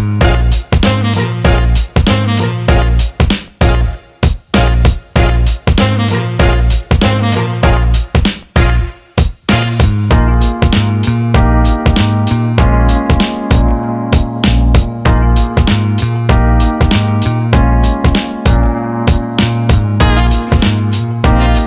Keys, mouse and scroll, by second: 1.8 click, 2.7 alt+shift+middle click, 3.1 alt+middle click, 5.8 click, 6.8 click, 7.8 click, 9.2-10.9 right drag, 12.2 click, 12.8-14.8 right drag, 15.5 alt+middle click, 17.0 alt+middle click, 17.6 click, 17.9 alt+shift+middle click, 19.2 click, 19.4 click, 20.4 shift+click, 21.2 ctrl+b.